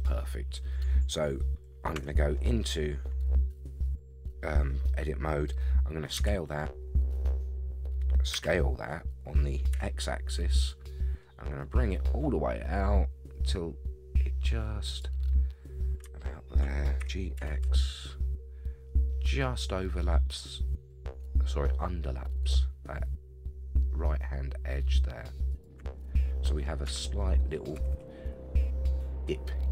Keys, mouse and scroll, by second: 1.9 Tab, 6.1 x, 8.3 s, 15.5-16.0 scroll up 2, 16.2 shift+middle click, 17.0 g, 26.0 middle click, 26.8 Tab, 27.2 middle click, 27.7 a, 27.9 a, 28.0-29.7 middle drag.